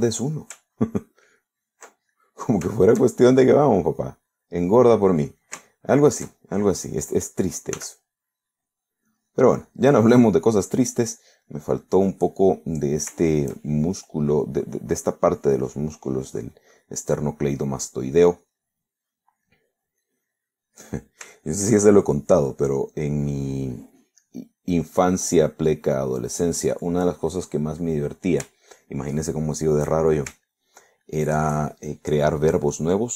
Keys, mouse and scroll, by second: 1.8 ctrl+click, 2.3 ctrl+click, 3.2 ctrl+middle click, 3.9 shift+middle click, 5.0 click, 6.0 middle click, 6.8 shift+middle click, 8.8 s, 9.4 middle click, 10.2-11.3 drag, 11.3 middle click, 11.9-13.1 drag, 13.2 middle click, 17.5 middle click, 18.1 middle click, 18.9 click, 19.5 click, 19.9 middle click, 21.1 click, 21.9 middle click, 22.5 shift+middle click, 23.2 shift+click, 23.6 middle click, 25.2-27.3 drag, 27.5 click, 27.9 middle click, 28.7 middle click, 29.8 shift+right click, 30.2 shift+middle click, 30.6 shift+right click, 30.9 shift+middle click, 31.1 shift+right click, 31.5 shift+middle click, 32.1 shift+right click.